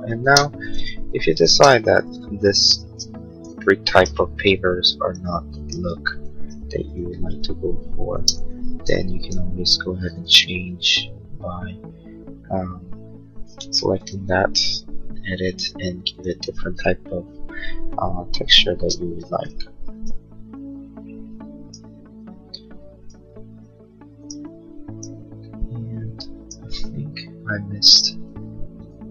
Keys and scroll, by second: 0.5 Escape, 2.4 b, 2.8 space, 3.0 Escape, 6.3 b, 8.1 space, 8.4 Escape, 13.6 b, 18.1 Escape, 18.8 space, 19.2 Escape.